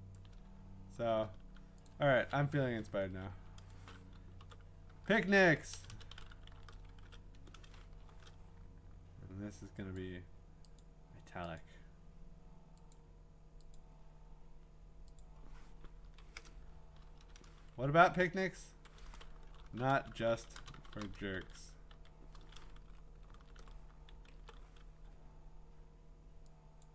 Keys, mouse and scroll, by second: 0.0-0.2 typing, 0.2 click, 0.5-1.0 scroll, 1.4 t, 1.9 click, 3.8 Up, 4.1-7.4 typing, 10.0 click, 10.8 click, 10.9 Up, 11.6 click, 12.9 click, 13.8 click, 15.2 click, 16.1 Right, 16.7-17.0 typing, 17.8 Down, 18.3 Down, 19.1-22.4 typing, 22.8 Up, 23.4 ctrl+shift+Left, 23.6 ctrl+shift+Left, 24.3 Right, 26.8 click.